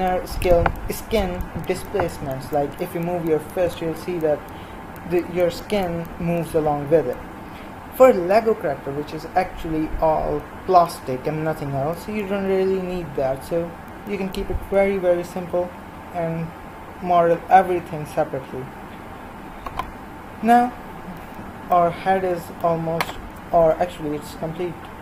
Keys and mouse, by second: 16.4-21.8 middle drag, 23.5 KP_1.